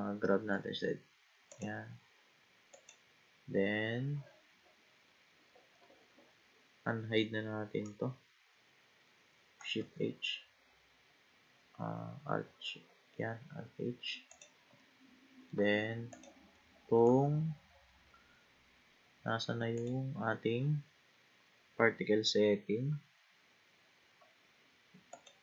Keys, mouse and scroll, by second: 0.2 g, 2.7 click, 4.9-6.8 scroll up 20, 9.8 shift+h, 12.4 alt+h, 14.3 click, 14.8-16.1 middle drag, 16.1 click, 16.6-19.7 middle drag, 19.8 click, 22.1-24.1 scroll down 8, 24.1-25.1 scroll up 2, 25.1-25.4 drag.